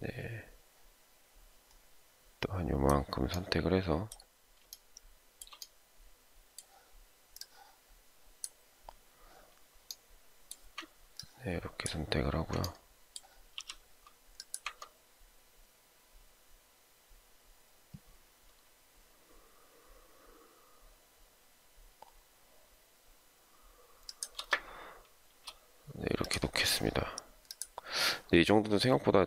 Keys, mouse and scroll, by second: 4.7 shift+middle click, 11.2 ctrl+click, 13.5 ctrl+shift+m, 24.1 shift+click, 25.3 space.